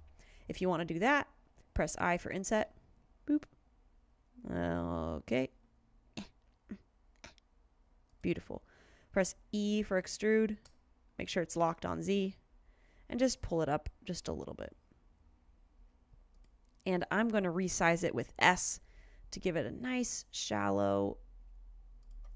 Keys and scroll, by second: 2.7 i, 10.7 e, 18.0 s.